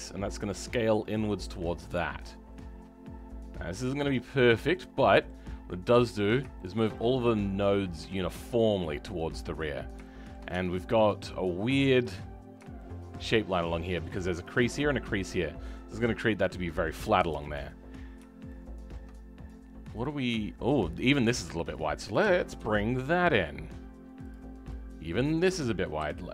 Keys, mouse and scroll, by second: 4.6-6.2 middle drag, 6.2 click, 6.5-8.2 shift+middle drag, 8.2 scroll down 2, 8.5-9.7 middle drag, 9.7 scroll up 2, 10.0 shift+middle click, 10.5 Tab, 12.7 shift+middle click, 13.5-13.8 scroll down 3, 13.8-17.3 middle drag, 17.3 KP_7, 17.8-18.4 scroll up 3, 18.4-19.9 shift+middle drag, 19.9 click, 20.3-21.4 shift+middle drag, 21.4 click, 22.2 g.